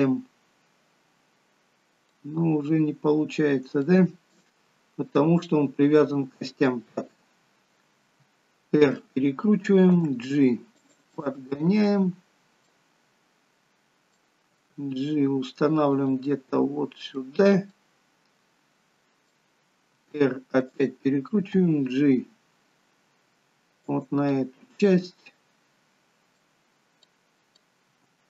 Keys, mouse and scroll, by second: 2.4 middle click, 3.7 shift+middle click, 4.5-5.0 scroll up 4, 11.0 scroll up 1, 11.0 g, 11.1 middle click, 11.9-12.4 scroll down 3, 12.6 middle click, 14.4 g, 16.2 middle click, 17.7 middle click, 19.8 r, 24.2 middle click, 24.2 g, 27.0 middle click, 27.8 g.